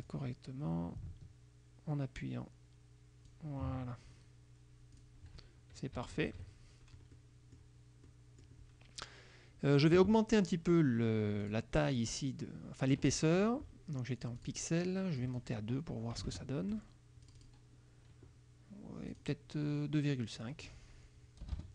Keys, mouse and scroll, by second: 0.1-3.6 drag, 5.0 click, 6.0 KP_Subtract, 7.2 click, 8.1 click, 11.5 click, 13.4 click, 14.4 click, 15.3 click, 16.3 KP_2, 16.4 KP_Enter, 17.4 click, 19.2 click, 20.5 click, 21.5 BackSpace.